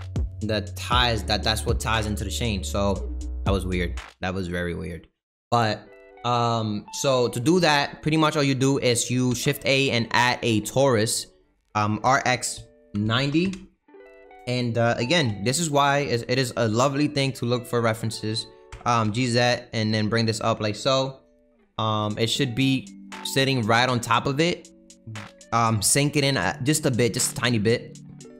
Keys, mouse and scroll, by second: 8.5-11.2 shift+right drag, 11.2 shift+a, 12.1 r, 15.2 s, 18.7 g, 23.6-24.4 scroll up 7, 24.4 middle click, 24.7-25.5 scroll down 1, 25.5 g, 27.7 click, 28.1 click.